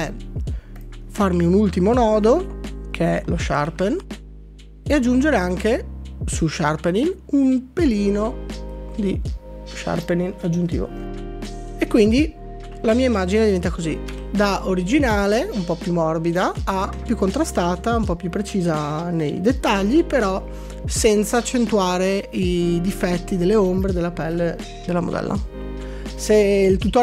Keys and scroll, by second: 12.7 shift+z, 14.2 d, 16.9 d.